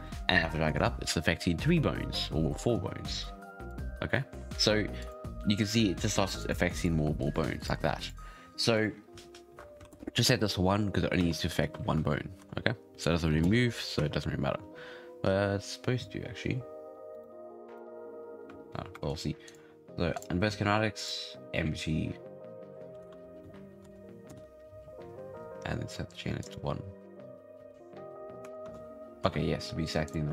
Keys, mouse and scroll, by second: 0.6 click, 0.9 scroll down 6, 3.6 click, 4.9-10.4 drag, 10.4 scroll up 7, 11.1 space, 11.4 scroll down 5, 11.7 space, 12.3 shift+Down, 13.9 space, 14.5 space, 15.2-17.1 scroll up 4, 17.1 right click, 17.6 right click, 18.9 shift+middle click, 19.4-24.0 drag, 24.9-26.3 scroll down 7, 26.3 click, 27.1-27.5 scroll up 4, 27.5 space, 28.6 shift+Left, 29.2 space, 30.0-30.3 drag.